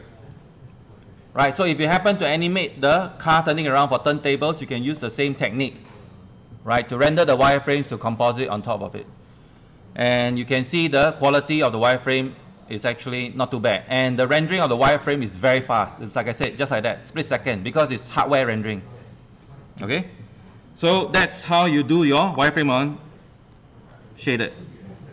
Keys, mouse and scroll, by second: 3.6 click, 10.8 ctrl+1, 14.0 right click, 21.5 click, 24.8 click.